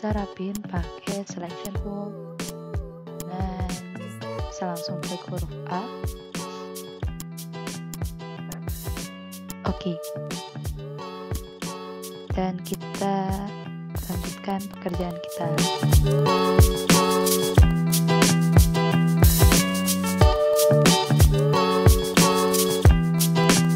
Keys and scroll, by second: 9.2 ctrl+z, 14.0 v, 14.4 ctrl+z, 14.8 a, 16.9 ctrl+z, 18.0 ctrl+z, 19.2 ctrl+z, 20.0 ctrl+z, 21.1 ctrl+z, 21.6 ctrl+z, 21.8 a.